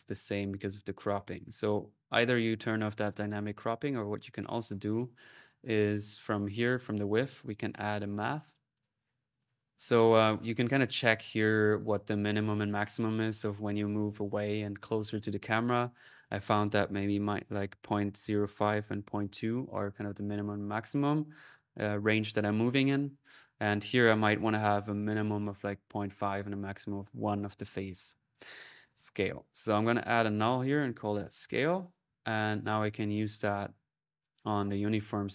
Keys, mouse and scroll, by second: 2.9-4.1 drag, 5.1-6.4 middle drag, 7.4-8.3 typing, 9.1 click, 15.6-17.1 drag, 20.8 middle click, 22.0 click, 23.4 click, 25.8 click, 26.8 middle click, 27.2 click, 28.6 alt+click, 28.9 alt+n, 29.5 alt+click, 30.1 alt+click, 32.4 click, 33.3-34.7 drag.